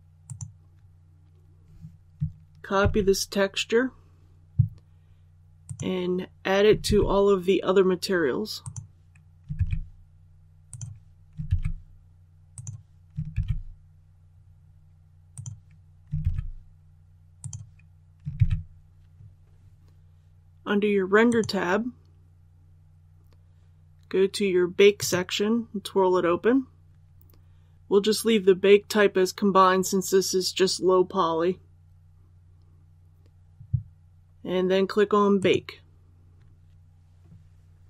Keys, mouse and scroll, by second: 2.7 ctrl+c, 5.6 click, 6.8 ctrl+v, 8.5 click, 9.5 ctrl+v, 10.6 click, 12.5 click, 13.3 ctrl+v, 14.2-15.2 scroll up 1, 15.2 click, 16.1 ctrl+v, 17.3 click, 18.3 ctrl+v, 19.8 click, 25.8-26.9 scroll down 1, 35.3 click.